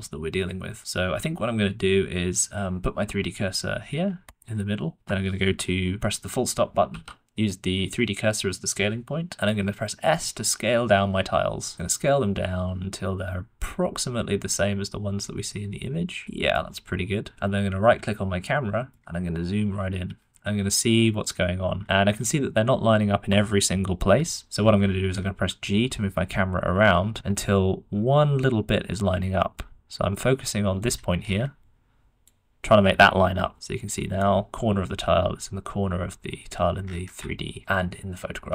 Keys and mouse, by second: 4.2 shift+click, 9.3 s, 18.9 drag, 18.9-20.1 middle drag, 22.0-24.8 middle drag, 25.7 g, 31.5 d, 32.2-33.3 drag, 33.3 d, 33.3 g.